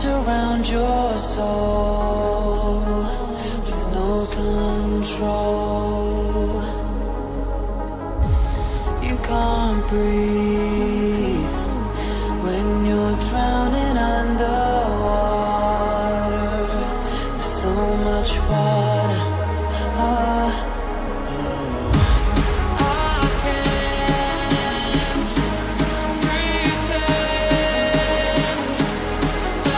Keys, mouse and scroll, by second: 0.4 ctrl+z, 0.8 ctrl+z, 1.4 click, 4.1 right click, 4.8 click, 6.9 scroll down 1, 7.4 scroll up 1, 8.6 right click, 9.7 click, 11.7 scroll down 1, 12.2 click, 13.4 right click, 15.9 click, 19.3 click, 22.1 ctrl+c, 22.3 ctrl+v, 23.0 scroll up 1, 23.4 click, 24.5 right click, 25.3 click, 26.8 scroll down 1, 27.4-28.4 scroll up 1, 28.4 right click, 29.0 ctrl+z, 29.4 click, 29.6 ctrl+z.